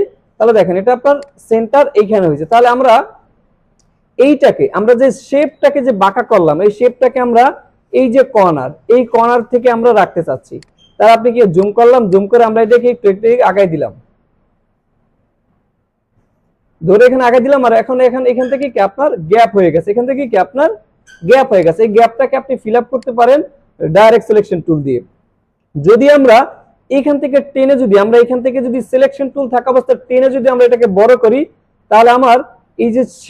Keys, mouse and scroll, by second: 2.5 alt+click, 2.7 space, 2.9 click, 3.6 alt+scroll up 1, 3.8 space, 4.9 alt+scroll up 1, 5.3 space, 5.4 click, 10.5 space, 10.6 click, 11.1 alt+scroll up 1, 11.4 space, 11.6-16.5 drag, 18.2 alt+scroll down 1, 18.4 space, 18.6 click, 19.3 space, 19.4 click, 19.8 space, 21.6 click, 21.8 space, 22.6 alt+scroll down 1, 22.9 space, 23.1-23.6 drag, 30.8-32.3 drag.